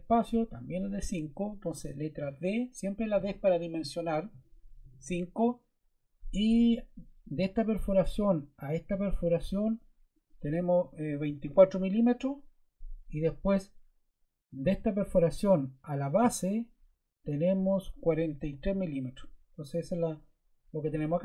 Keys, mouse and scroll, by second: 2.1 d, 2.8 click, 3.5 click, 4.9 typing, 10.7-11.7 typing, 15.9 click, 17.2 click, 18.2-19.2 typing.